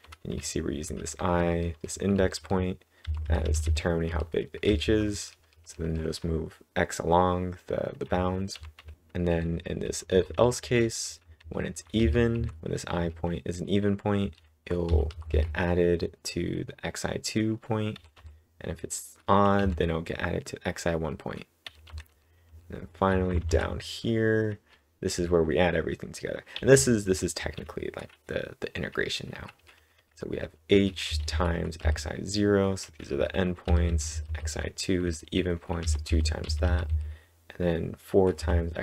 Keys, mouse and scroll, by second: 0.0-6.1 typing, 8.5 typing, 12.0-14.7 typing, 19.5 j, 21.6 j, 22.1 j, 23.2 z, 26.5 typing, 30.1-33.3 typing, 35.8-36.8 typing.